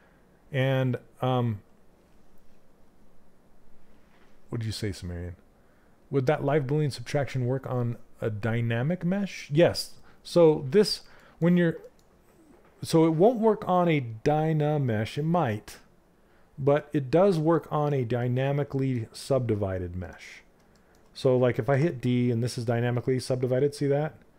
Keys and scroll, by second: 21.2 d.